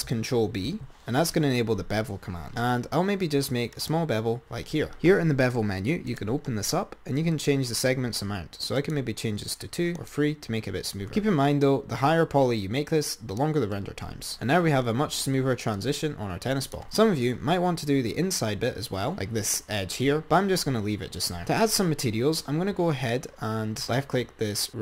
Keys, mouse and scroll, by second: 1.0 ctrl+b, 5.1-11.5 drag, 11.8 click, 14.2-15.2 scroll down 10, 15.9 click, 16.9 Tab, 17.4-18.2 scroll up 4, 19.0 click.